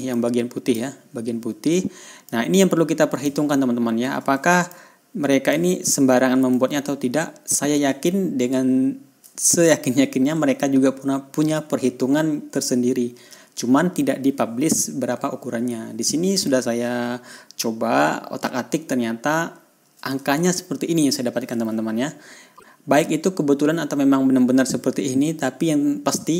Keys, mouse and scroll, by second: 0.6 click, 2.7-3.8 drag, 5.1 ctrl+click, 7.3-8.7 ctrl+scroll down 2, 10.4 ctrl+scroll up 2, 21.0 ctrl+scroll down 2, 21.5-21.8 ctrl+scroll up 2.